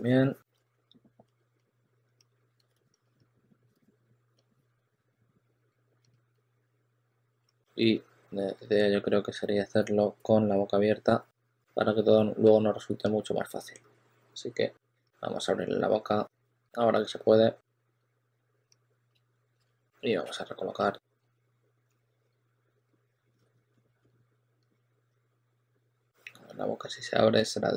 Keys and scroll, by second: 0.5-5.9 typing, 7.5 w, 9.2 2, 9.6 w, 11.5 e, 14.9 w, 16.0 w, 17.8-23.9 typing, 23.3 super+a, 25.8 w.